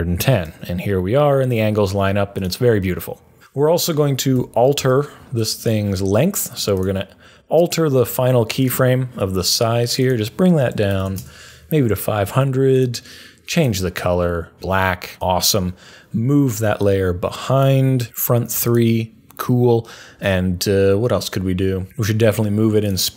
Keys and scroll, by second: 4.3 u, 10.5-11.5 typing.